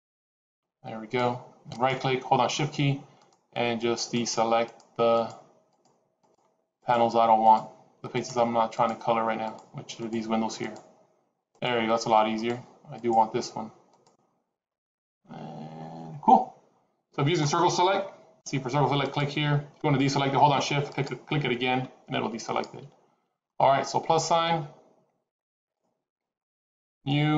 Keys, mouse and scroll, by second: 3.1 shift+click, 3.9 shift+click, 4.6 shift+click, 5.1 shift+click, 5.6 shift+click, 6.1 shift+click, 6.8 shift+click, 7.7 shift+click, 8.0 shift+click, 8.7 shift+click, 9.9 shift+click, 10.7 shift+click, 11.5 shift+click, 12.3 shift+click, 13.0 shift+click, 13.8 shift+click, 18.3 c, 22.9 scroll down 2, 25.5 click, 26.8 click.